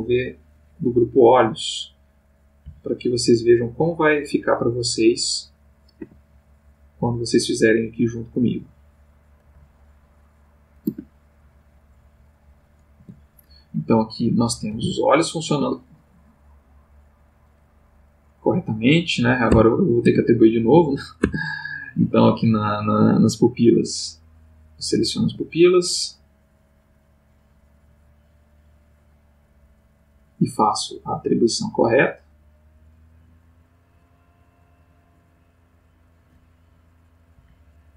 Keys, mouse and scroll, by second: 0.0 click, 2.6 Left, 4.0 click, 6.0 a, 8.3 click, 9.5 Left, 10.8 a, 11.8 click, 12.9 Tab, 14.1 click, 14.7 g, 15.6 Escape, 19.5 Tab, 20.5 click, 21.2 Tab, 23.5 click, 24.6 click, 25.2 a, 27.2 click, 28.2 click, 31.0 middle click, 31.6 middle click, 35.8 click, 37.3 Right.